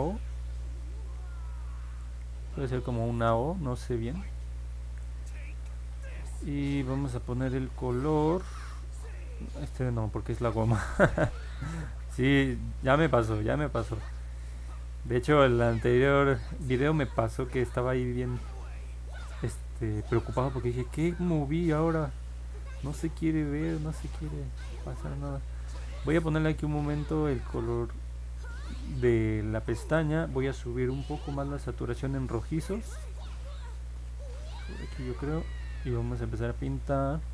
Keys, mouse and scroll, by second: 22.0-23.7 drag.